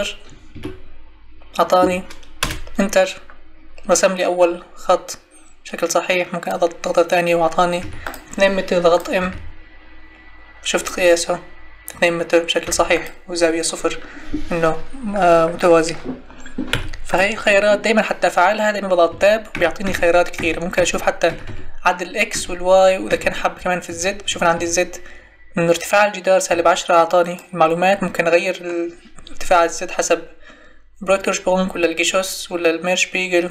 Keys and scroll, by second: 2.4 Return, 7.8 Escape, 9.2 m, 12.6 m, 16.7 Delete, 19.1 Tab, 26.5 Tab.